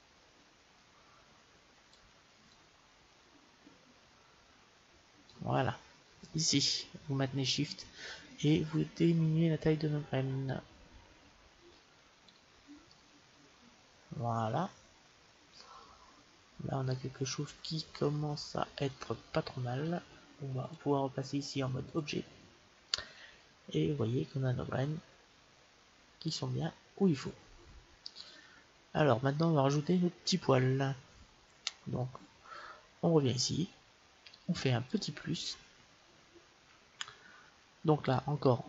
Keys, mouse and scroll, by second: 2.8-4.3 drag, 7.6-9.6 drag, 12.8-14.9 middle drag, 22.0 click, 22.8-24.6 middle drag, 32.3-34.8 middle drag, 34.8-36.6 drag, 38.0-38.6 drag.